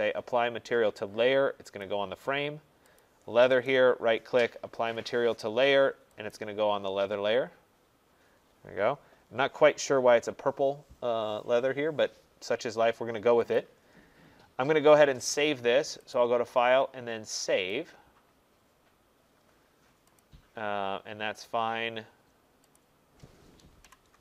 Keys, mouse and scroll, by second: 1.8 click, 3.0 click, 3.7 right click, 6.3 click, 13.6 click, 14.2 middle click, 14.3 middle click, 16.1 click, 17.7 click, 20.2 click, 22.8 click, 23.6-24.2 typing.